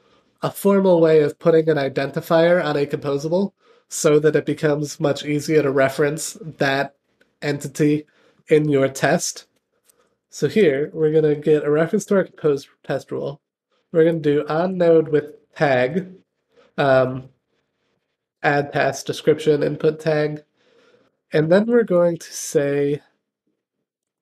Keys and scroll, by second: 11.9 Return, 21.3 Return.